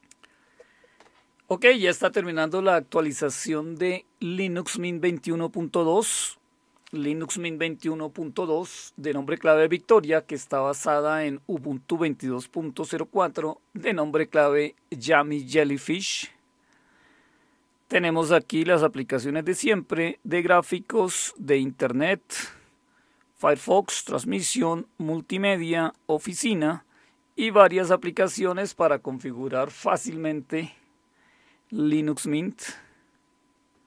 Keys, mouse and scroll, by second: 6.1 click, 21.3 click, 24.5 click, 25.8 click, 26.2 click, 28.3 click, 30.1-30.8 scroll down 1, 30.8-33.8 scroll down 3.